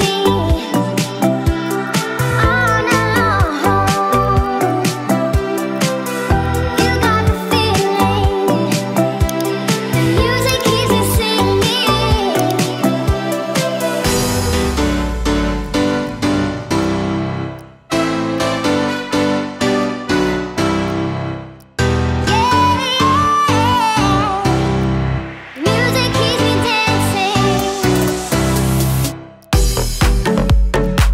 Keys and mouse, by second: 1.6 click, 1.8 click, 2.2-3.2 middle drag, 3.4 click, 3.6 middle click, 3.9 click, 4.2 click, 4.6 click, 4.9 click, 5.3 ctrl+z, 5.3 click, 5.8 click, 6.0 middle click, 6.4 click, 6.7 click, 7.1 click, 7.5 click, 7.9 click, 8.0 space, 8.3 space, 9.4-12.7 drag, 12.8 click, 13.2 shift+click, 13.7 shift+click, 14.0 space, 15.6 click, 17.5 click, 18.3 click, 19.3 middle click, 19.8 click, 21.0 space, 22.4 click, 24.1 click, 24.8 alt+click, 25.5 click, 27.4-30.7 drag.